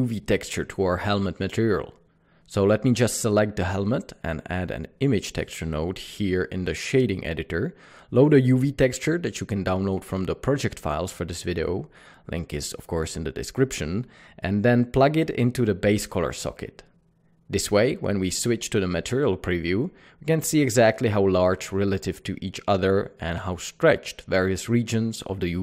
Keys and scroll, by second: 5.9 n, 7.3-7.9 typing.